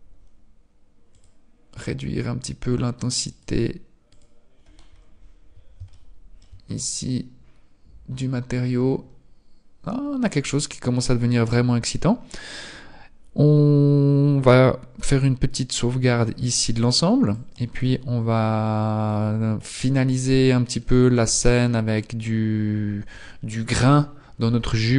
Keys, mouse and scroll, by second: 17.4 click, 18.9 click, 19.9-20.9 scroll down 4, 20.9-22.3 scroll down 1.